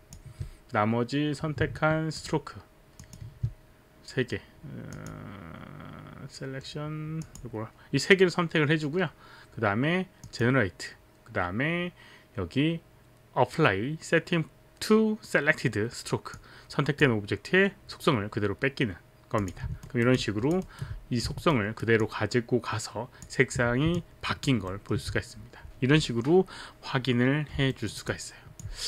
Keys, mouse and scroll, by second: 2.1 ctrl+click, 3.0 ctrl+click, 5.0 click, 7.2 click, 10.2 click, 16.3 click, 19.4 click, 19.9 alt+right click, 20.2 alt+click, 20.6 alt+right click, 20.8 alt+right click, 20.8 alt+click, 21.3 alt+right click, 21.5 alt+right click, 22.0 alt+click, 23.9 alt+click, 25.1 alt+middle click, 27.7 alt+middle click, 28.1 alt+click.